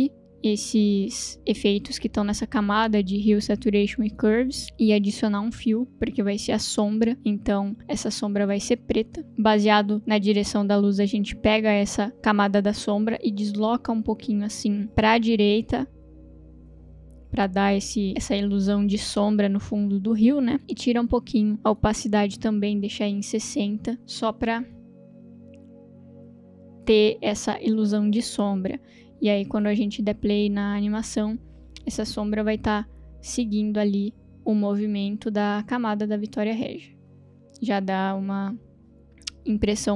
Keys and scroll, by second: 4.6 Delete, 5.2 ctrl+space, 5.4 1, 21.4 t, 22.7 6, 23.0 0, 23.0 Return, 29.9 space.